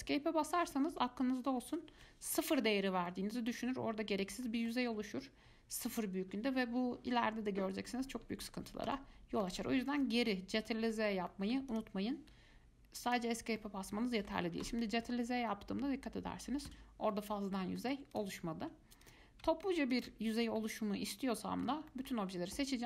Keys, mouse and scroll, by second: 1.1 g, 3.3-7.7 middle drag, 9.1 ctrl+z, 9.6 ctrl+z, 10.2 middle click, 10.8 click, 11.1 shift+middle click, 11.9 click, 13.3 click, 13.8-14.8 middle drag, 14.8 g, 17.3-18.3 middle drag, 18.3 click, 19.2 click, 20.1 alt+click, 20.8-22.8 middle drag.